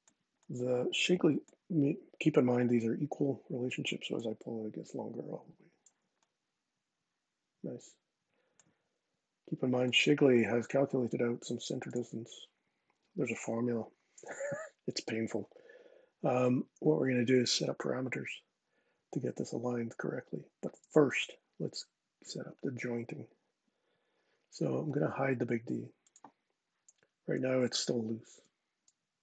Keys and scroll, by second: 28.0 super+z.